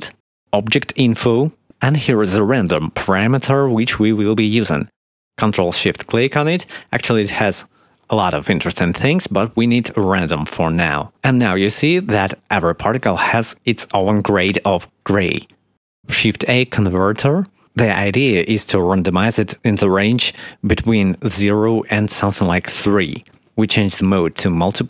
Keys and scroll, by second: 4.0 shift+a, 14.7 shift+a, 21.3 3.